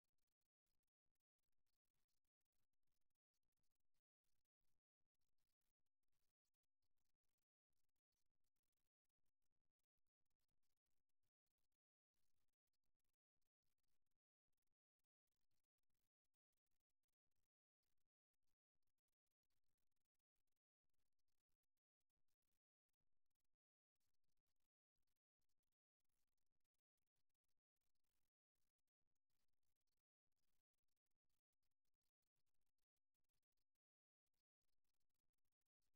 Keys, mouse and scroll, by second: 0.3 right click, 0.7-2.3 right drag, 3.0-4.8 right drag, 5.9-8.3 middle drag, 9.9-12.3 middle drag, 12.3-14.5 right drag, 13.9 g, 16.3-17.3 right drag, 17.3 g, 18.1-19.3 drag, 19.9 g, 22.9-24.9 right drag, 23.3 g, 25.4 right click, 25.7 g, 27.3-30.9 right drag, 27.7 g, 31.1-33.7 right drag, 34.9 KP_3.